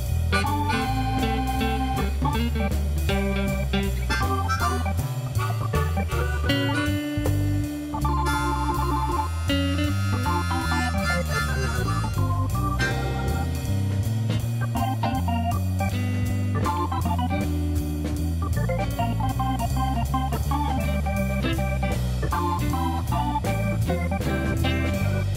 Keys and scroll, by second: 0.8 ctrl+r, 1.5 1, 3.0 Escape, 4.7 ctrl+r, 6.6 Return, 7.7 ctrl+r, 9.5 Return, 10.4 a, 12.1 Return, 12.8 1, 17.8 1, 18.2 alt+a.